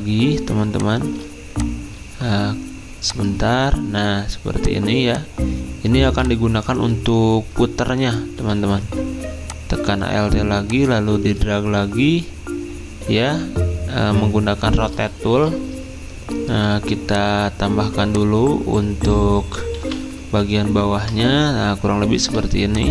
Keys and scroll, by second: 20.4 ctrl+[.